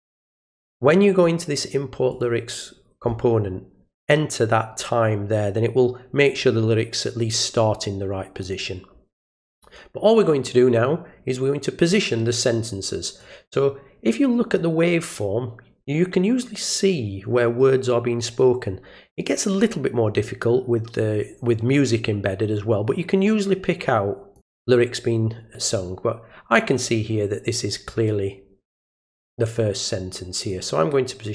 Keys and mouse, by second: 0.8 right click, 2.1 click, 4.1 click, 8.4 click, 13.2-14.5 drag, 23.3-24.3 drag, 28.1-29.3 drag, 30.5 click.